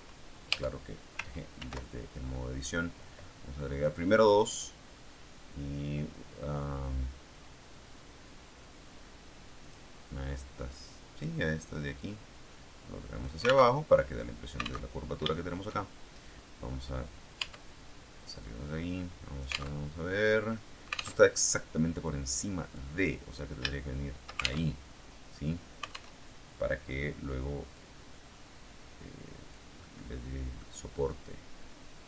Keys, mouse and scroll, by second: 0.4 Tab, 1.5 ctrl+r, 3.7 click, 4.2 click, 9.5 click, 11.9-13.3 drag, 13.7 alt+Tab, 14.8 alt+Tab, 15.2 shift+middle click, 17.3 Tab, 18.3-19.7 drag, 19.7 alt+Tab, 21.1 alt+Tab, 22.6 click, 23.6 shift+middle click, 24.5 alt+shift+Tab, 26.1 alt+Tab, 27.7-29.6 drag, 29.7 middle click, 31.0-32.0 drag.